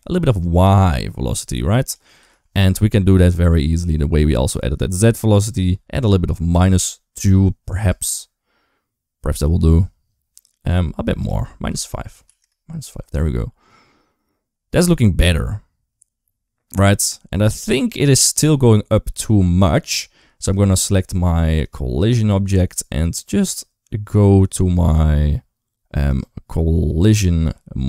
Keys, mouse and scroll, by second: 0.1 d, 0.2-1.8 drag, 1.8 d, 2.1 ctrl+z, 3.0 KP_0, 5.2-7.0 drag, 7.7 space, 11.0-12.2 drag, 20.2 click, 21.4 click, 25.9 click.